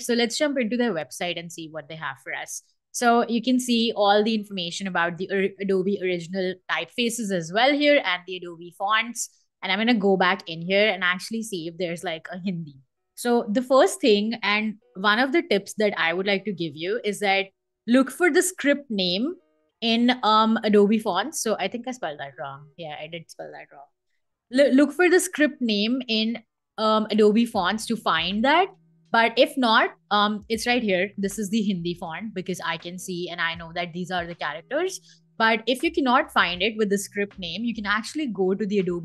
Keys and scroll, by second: 12.2-15.6 typing, 16.4 Return, 23.4 Right, 23.6 a, 25.7 Return.